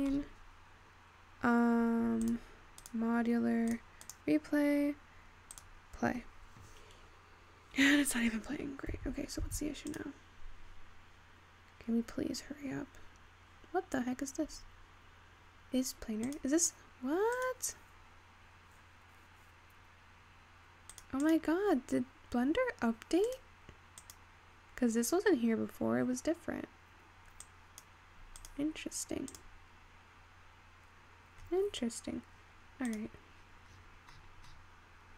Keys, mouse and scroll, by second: 3.2 scroll down 1, 3.3-10.5 drag, 12.3-15.2 scroll down 4, 15.2-17.3 scroll down 1, 17.3-22.3 drag, 22.3-23.3 scroll down 6, 23.3-24.5 drag, 27.5 click, 28.6-34.8 drag, 34.8-35.1 scroll down 10.